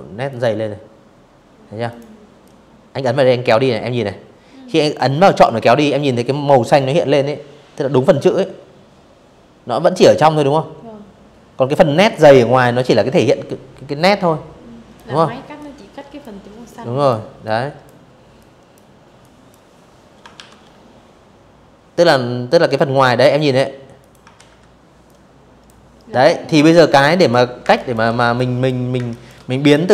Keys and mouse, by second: 0.1 click, 13.2 click, 14.4 click, 15.1 click, 16.0 click, 16.9 click, 18.0 ctrl+shift+o, 21.7 click, 22.0 ctrl+z, 22.7 click, 25.3 space, 25.4 click, 25.7 v, 26.0 click, 26.6 space, 26.8 click.